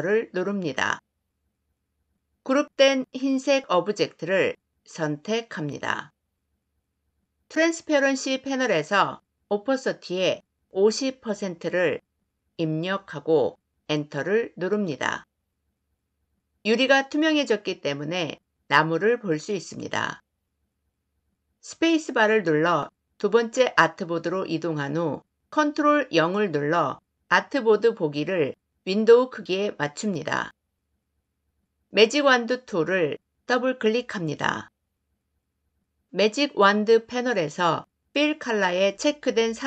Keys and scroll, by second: 13.6 Return, 21.5 space, 25.5 ctrl+0, 31.9 y.